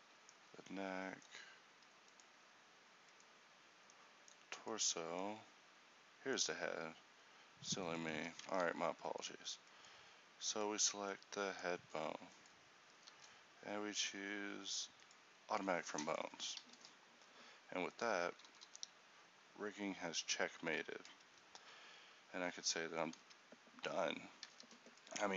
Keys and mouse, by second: 8.6 ctrl+t, 13.2 w, 18.6 r, 23.3 ctrl+t, 24.6 a.